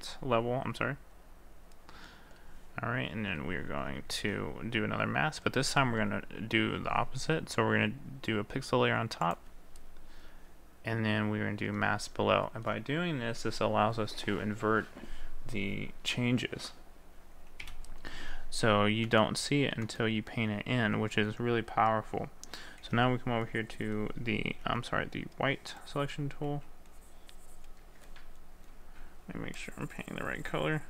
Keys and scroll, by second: 4.3 ctrl+z.